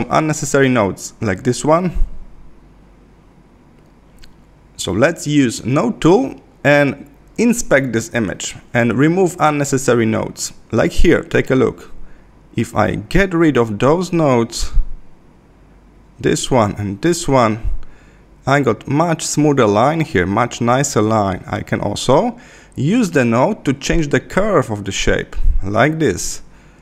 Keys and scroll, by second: 0.7 Left, 12.2 Left, 15.4 Left.